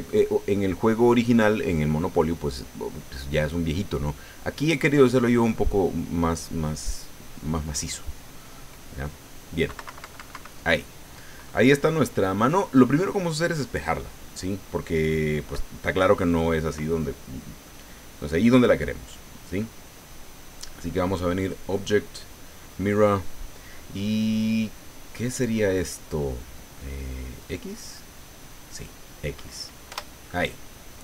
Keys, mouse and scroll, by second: 8.4 click, 9.7 KP_Subtract, 10.6 click, 14.5 ctrl+scroll down 1, 15.7 right click, 16.4 click, 17.6-19.2 middle drag, 19.6 scroll up 1, 21.3 click, 27.4 click, 29.9 Return.